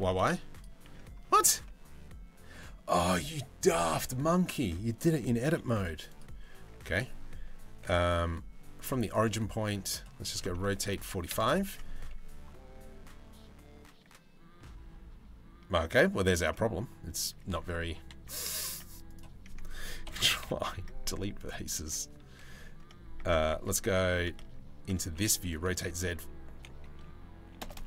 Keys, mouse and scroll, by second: 0.4 Tab, 1.1 Tab, 4.9 g, 6.2 Tab, 6.5 Tab, 8.8 click, 10.0 r, 11.2 Tab, 15.8 Tab, 19.6 ctrl+i, 20.0 Delete, 21.4 Tab, 22.8 Tab, 23.1 a, 24.0 Tab, 24.6 r.